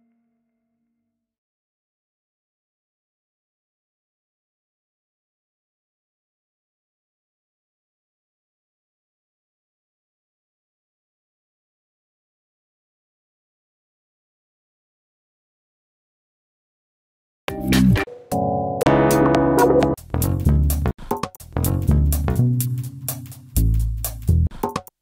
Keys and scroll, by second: 1.2 super+d, 8.9 BackSpace, 10.6 BackSpace, 12.2 super+r, 12.4 super+Right, 13.0 BackSpace, 13.1 3, 13.4 Return.